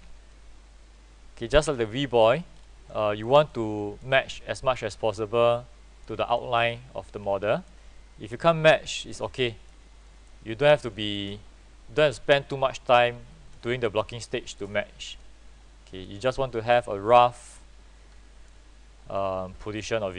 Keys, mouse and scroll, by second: 0.4 click, 2.1 alt+middle click, 2.3-3.0 scroll up 1, 3.0 click, 6.5 alt+middle click, 7.0-7.5 scroll down 1, 7.6 click, 9.6 alt+middle click, 10.2 click, 12.3 click, 13.9 alt+middle click, 14.4-20.1 drag.